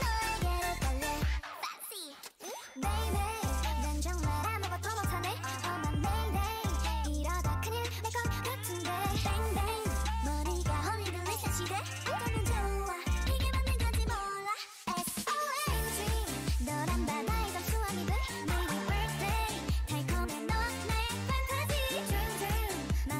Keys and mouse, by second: 1.3 Tab, 3.0 Tab, 6.3-7.3 typing, 7.8 click, 9.6 f, 11.0-15.9 typing, 17.9 ctrl+r, 18.8 middle click, 19.5 k, 22.3 k.